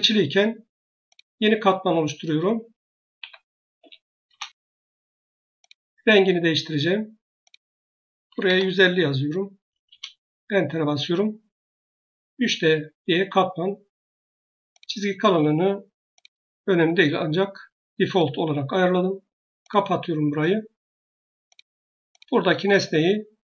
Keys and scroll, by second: 3.0-3.6 typing, 4.1 Return, 7.8-8.8 typing, 9.7 Return.